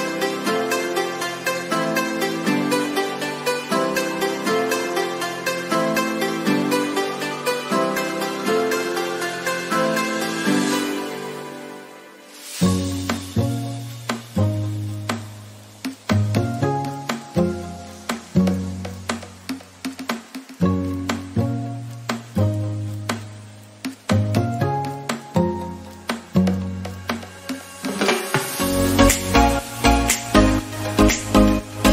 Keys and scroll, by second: 1.7 ctrl+d.